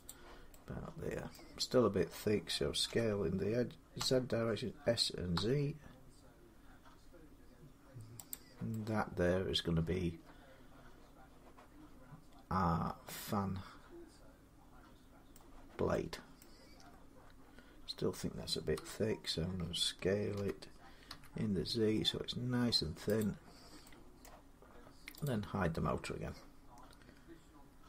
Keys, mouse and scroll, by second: 0.5 y, 1.1 middle click, 1.4-2.2 scroll up 1, 2.7 d, 3.8 s, 5.1 z, 6.1 middle click, 6.1 scroll, 8.1-13.2 drag, 15.1 middle click, 16.2 middle click, 17.2-18.5 scroll, 18.5 1, 20.2-20.9 typing, 23.0 click, 23.8 z, 24.0 middle click, 25.1 click.